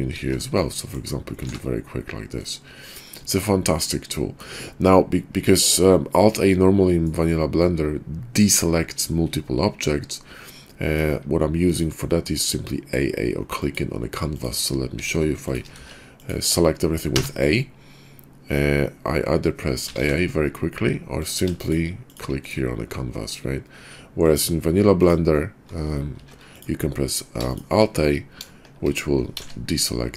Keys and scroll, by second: 0.1 ctrl+z, 1.4 alt+a, 3.2 Tab, 14.9 shift+d, 15.8 shift+d, 17.1 a, 19.8 a, 20.0 a.